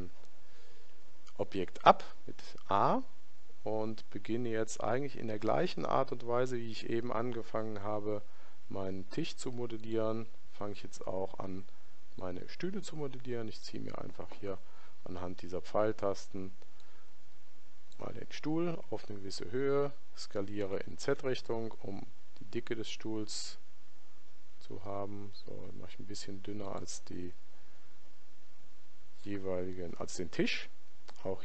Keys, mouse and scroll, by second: 0.7 a, 2.7-5.1 middle drag, 5.1 shift+a, 12.1 click, 16.7 click, 20.6 s.